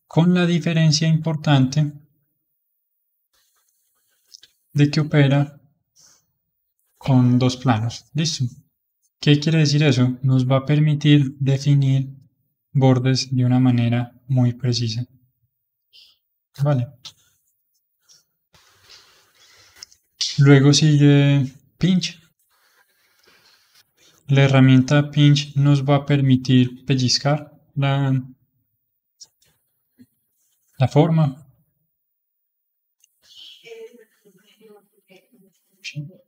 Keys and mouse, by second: 0.5-2.3 middle drag, 2.3-10.6 drag, 10.6-13.2 middle drag, 13.2-15.8 drag, 15.8-21.3 middle drag, 21.3 click, 22.3-27.8 middle drag, 29.3 f, 30.5-31.6 middle drag, 31.6-35.1 drag, 35.2-36.2 middle drag.